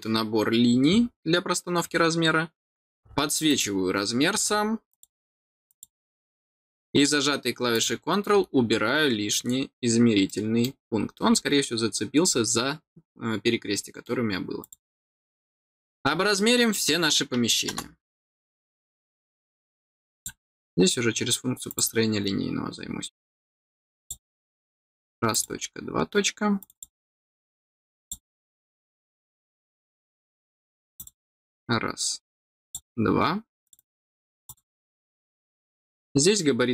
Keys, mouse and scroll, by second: 3.4 click, 4.8 click, 5.6 click, 7.6 click, 10.2 middle click, 10.9-11.2 scroll up 2, 11.2 scroll down 1, 12.2-12.8 scroll down 2, 13.7 middle click, 14.5 click, 15.5 scroll down 1, 20.1 click, 21.6 click, 23.9-25.3 drag, 26.5 click, 27.9 click, 30.9 click, 32.5 click, 33.6 click, 33.7 click, 34.4 click, 34.9-35.3 scroll up 2, 35.9 scroll down 1.